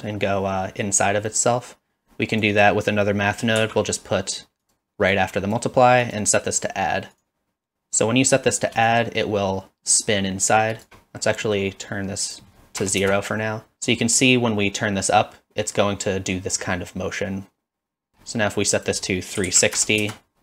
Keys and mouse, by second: 3.6 shift+d, 4.6 click, 5.2-5.6 drag, 6.1-7.2 drag, 8.0 click, 8.9-10.8 shift+drag, 11.5 middle click, 12.2-13.4 drag, 14.3-18.1 shift+drag, 18.7-20.4 drag.